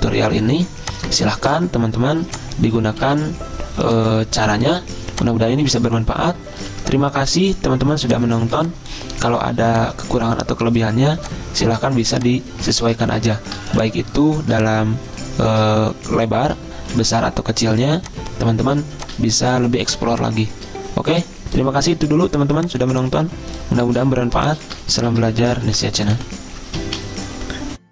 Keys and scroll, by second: 3.1 c, 6.2-7.2 typing, 13.1 ctrl+z, 17.0 ctrl+g, 25.2 ctrl+g, 25.7 ctrl+a, 26.3 p, 27.0 ctrl+z.